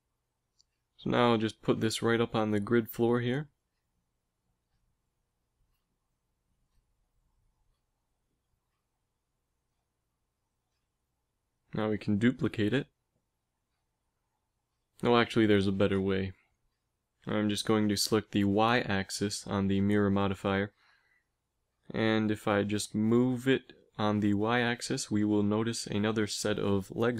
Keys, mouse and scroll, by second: 0.2 g, 4.2 middle click, 10.9-12.5 middle drag, 11.7 shift+d, 16.4 ctrl+z, 17.1 g, 18.6-20.4 drag, 20.4 middle click, 21.2 g.